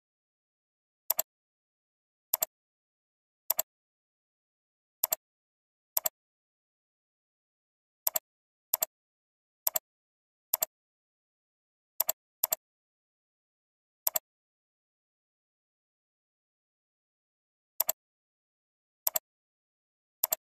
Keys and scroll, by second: 4.3 ctrl+c, 6.5 ctrl+v, 11.3 ctrl+c, 12.9 ctrl+v.